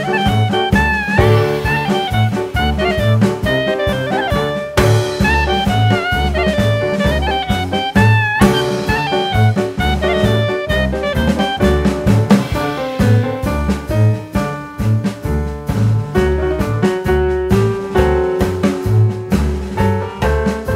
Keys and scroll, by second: 0.0 s, 1.0 KP_1, 2.4 s, 11.8 a, 15.2 ctrl+b.